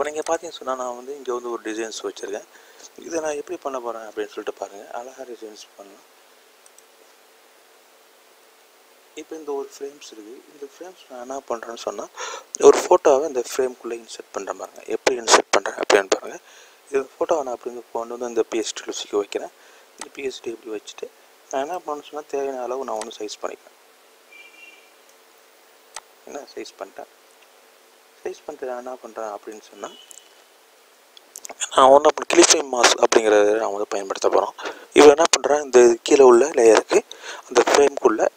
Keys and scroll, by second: 12.4 n, 34.9 e.